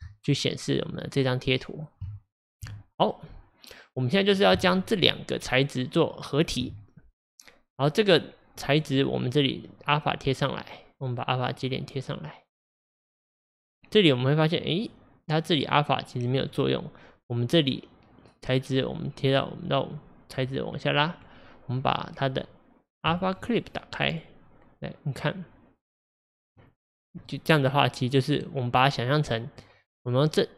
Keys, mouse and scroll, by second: 2.3 ctrl+shift+click, 4.7 ctrl+shift+click, 6.1 ctrl+shift+click, 10.1-11.5 drag, 16.4-27.3 drag, 27.3-30.5 middle drag.